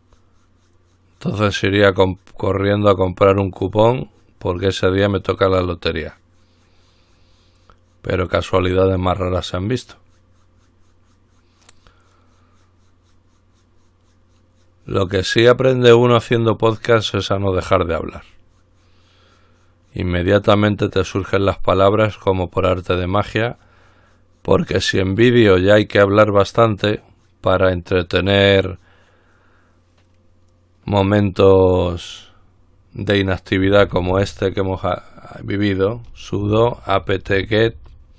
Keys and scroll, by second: 33.9 typing, 35.9-38.1 typing.